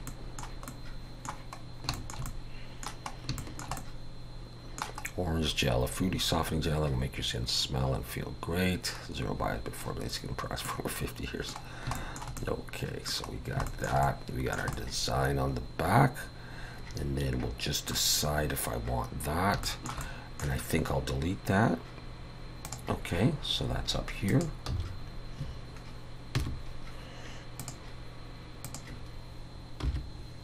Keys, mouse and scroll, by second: 0.1 middle click, 0.7 middle click, 1.6 scroll down 2, 2.0 shift+middle click, 2.3 middle click, 3.1 scroll up 1, 3.4 shift+middle click, 3.8 middle click, 5.1 scroll up 2, 8.2 scroll down 1, 9.1-10.6 scroll up 1, 10.6 middle click, 11.6 scroll down 2, 11.9 shift+middle click, 12.4 middle click, 13.3 scroll down 1, 13.7 shift+middle click, 14.0 middle click, 14.7 middle click, 19.6 shift+middle click, 20.0 middle click.